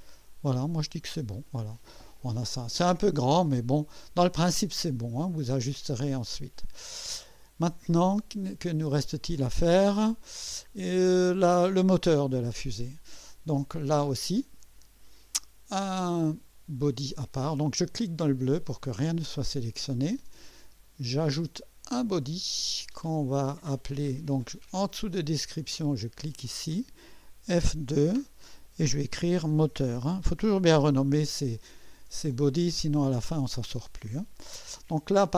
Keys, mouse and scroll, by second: 0.7 click, 1.4 scroll down 1, 1.6 scroll up 1, 1.9-5.0 drag, 5.1 scroll down 1, 5.8-8.7 drag, 16.2 click, 18.2 click, 21.8 click, 26.3 click, 28.0 F2, 29.0-32.1 typing.